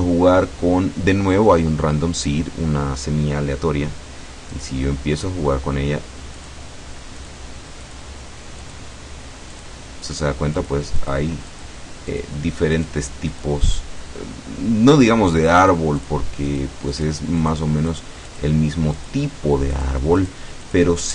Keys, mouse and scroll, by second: 4.6 click, 6.5 click, 7.3 click, 7.9 click, 8.7 click, 9.6 click, 10.1 click, 10.7 click, 11.1 click, 11.6 click, 12.2 click, 12.9 click, 13.4 click, 15.7 click, 16.5 click, 17.0 click, 17.5 click, 18.0 click, 18.4 click, 19.1 click, 19.8 click, 20.3 click, 20.7 click.